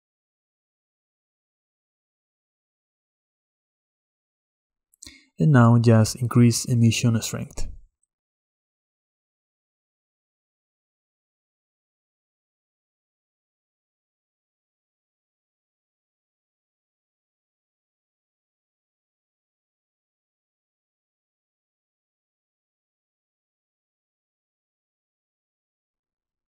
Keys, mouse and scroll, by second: 5.6 middle click, 6.5-8.5 drag, 9.7 click, 10.5 scroll down 2, 10.6-15.3 middle drag, 15.3 scroll up 5, 15.4-21.2 middle drag, 25.8 scroll up 1.